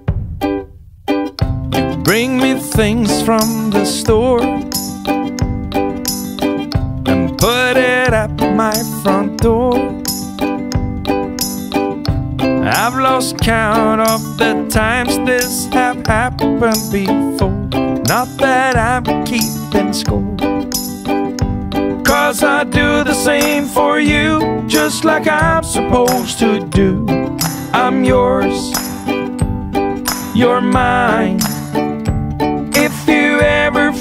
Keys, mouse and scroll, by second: 1.8 click, 3.6 click, 7.1 click, 8.5 click, 12.3 click, 15.5 click, 17.3 click, 18.8 click, 21.1 click, 23.2 click, 24.9 click.